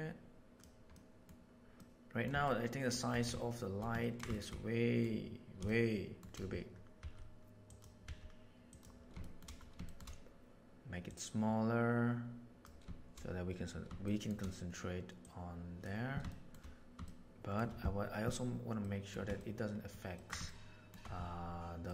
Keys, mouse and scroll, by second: 0.9-1.2 middle drag, 1.8-2.2 middle drag, 2.4 shift+middle click, 3.5 shift+middle drag, 4.0 ctrl+middle click, 4.3 shift+middle click, 4.5 middle click, 5.6-6.2 shift+middle drag, 6.9 s, 8.0 s, 9.2 shift+middle click, 9.8 shift+middle click, 11.1-12.6 middle drag, 14.0 shift+middle drag, 15.2 click, 15.5 right click, 16.2 shift+middle click, 17.0-17.6 shift+middle drag, 18.8 middle drag, 19.3-19.8 ctrl+middle drag, 20.1 ctrl+middle click, 20.4 shift+middle click, 21.8 middle click.